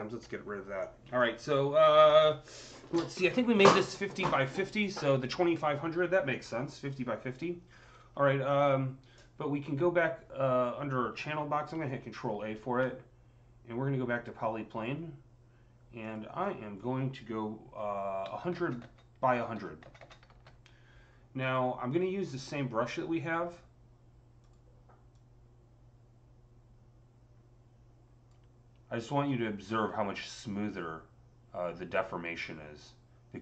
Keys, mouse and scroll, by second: 11.1 ctrl+z, 11.1 typing, 11.7 ctrl+a, 14.5 click, 15.9 click, 16.3-18.7 drag, 18.1-19.9 typing, 19.1 Tab, 20.9 KP_Enter, 21.3 click, 23.1 click, 24.3-29.1 drag, 29.1 scroll up 6, 30.2-33.4 alt+drag.